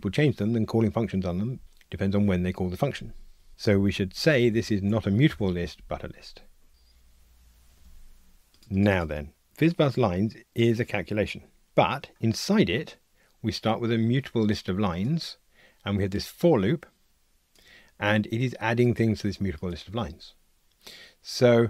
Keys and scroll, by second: 4.4 alt+shift+Left, 5.4 Delete, 6.7 ctrl+r.